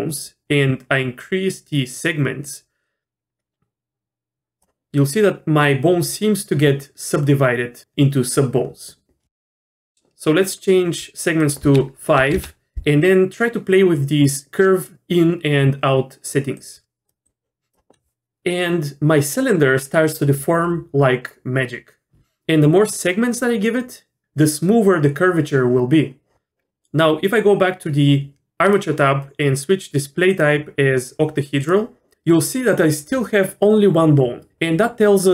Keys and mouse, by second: 2.4-4.6 drag, 11.4-13.1 drag, 16.7 click, 17.2 click, 23.4 click, 28.7 click, 30.3-31.7 drag.